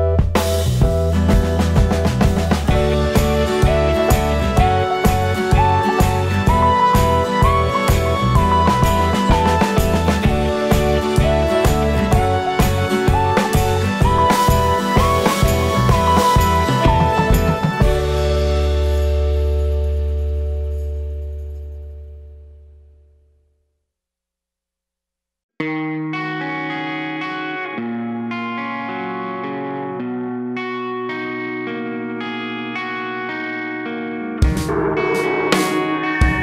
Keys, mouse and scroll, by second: 0.3 scroll down 2, 0.5 alt+a, 0.5 `, 3.9 click, 4.2 scroll down 2, 4.3 scroll up 2, 4.6 `, 4.9-5.6 scroll down 2, 5.6 KP_7, 8.6 g, 8.6 click, 8.7 KP_1, 9.1 r, 9.5 click, 9.6 g, 9.8 click, 12.7-14.0 drag, 13.0 KP_7, 13.2-13.7 scroll up 1, 13.7 r, 14.1-14.5 scroll down 1, 14.5 shift+d, 15.1 alt+r, 15.9-19.5 typing, 16.0 click, 16.8 click, 17.3 scroll down 1, 19.0 click, 19.4 click, 20.6 click, 20.9 scroll up 1, 21.0 g, 21.6 scroll up 1, 21.8 scroll down 1, 21.9 alt+a, 22.1 `, 22.4 scroll up 1, 22.5 `, 23.5-30.1 drag, 24.8 scroll down 1, 25.0 `, 25.2-25.7 scroll up 1, 25.7 s, 26.4 scroll up 1, 26.6 right click, 26.6 `, 26.8 scroll down 1, 27.2 KP_7, 32.7 click, 32.9 KP_1, 33.3 g, 33.7 click, 34.1 g, 34.3 click, 34.8 alt+a.